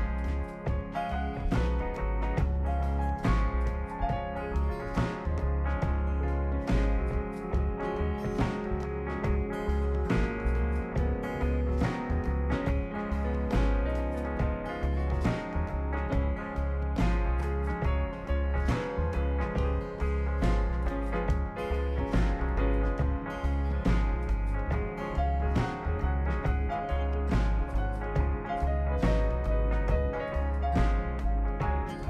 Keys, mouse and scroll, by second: 0.0 right click, 1.3 ctrl+click, 3.6 click, 4.2 scroll down 2, 5.1 scroll up 2, 6.2 click, 7.3 click, 7.8 click, 8.6 ctrl+click, 11.6 click, 12.5 scroll down 2, 12.7 right click, 13.1 scroll up 2, 13.6 middle click, 14.4-16.1 drag, 16.7 click, 18.4 click, 21.8 click, 23.8-26.8 typing, 27.5 Return, 28.2 scroll down 2, 28.8 scroll down 2, 29.6 click.